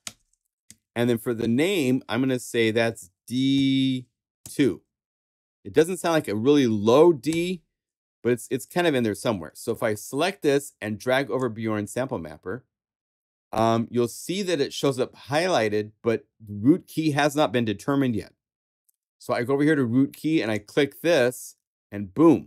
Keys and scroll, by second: 0.0 Page_Up, 0.6 Right, 1.0 BackSpace, 3.5 shift+d, 4.4 shift+2, 7.2 Return.